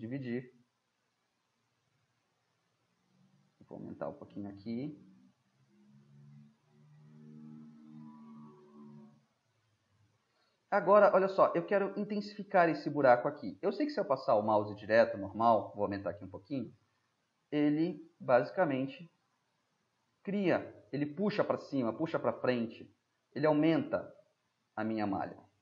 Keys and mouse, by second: 2.1-11.8 middle drag, 13.8-16.6 drag, 16.0 ], 16.9 drag, 24.3 click, 24.3-25.6 middle drag.